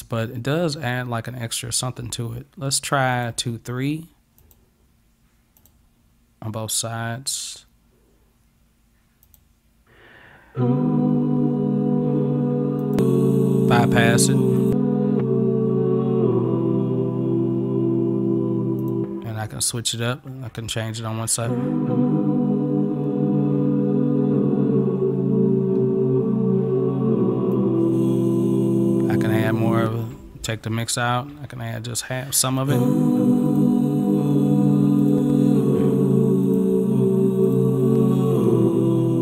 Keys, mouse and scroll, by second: 3.2 click, 4.5 click, 5.6 click, 9.3 click, 12.9 click, 14.7 click, 18.8 click, 20.0 click, 27.6-32.6 drag, 33.5 click, 35.0 click, 36.5 click, 37.5 click.